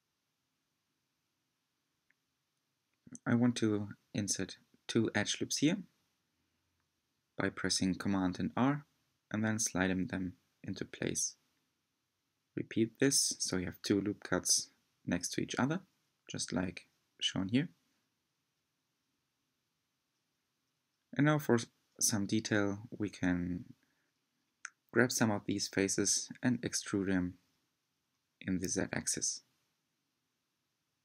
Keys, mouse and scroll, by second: 1.2-1.6 scroll up 3, 3.4 r, 9.1 r, 15.4-19.3 middle drag, 19.3 3, 20.1 click, 20.8 shift+click, 21.9 shift+click, 22.7 shift+click, 23.4-27.1 middle drag, 27.1 e, 30.1-31.0 middle drag.